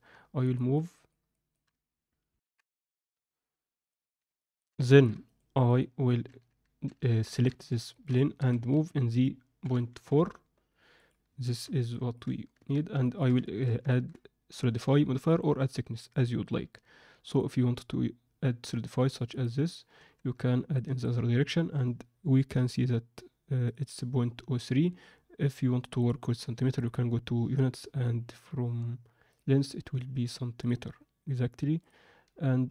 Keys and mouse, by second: 0.4 ctrl+middle drag, 0.7 ctrl+alt+middle click, 1.2 ctrl+middle click, 2.2 ctrl+F9, 2.4 ctrl+F10, 3.8 drag, 4.3 ctrl+alt+middle click, 4.8 alt+shift+middle drag, 5.2 click, 5.7 click, 6.4 Tab, 6.8 Tab, 7.2 alt+shift+middle drag, 7.8 ctrl+middle click, 8.3 g, 11.4 shift+middle click, 11.8 ctrl+middle click, 12.5 Tab, 13.0 ctrl+middle click, 13.4 shift+middle click, 17.2-19.4 drag, 19.9 Tab, 20.7 click, 23.8 click, 26.7 drag, 29.3-30.6 drag.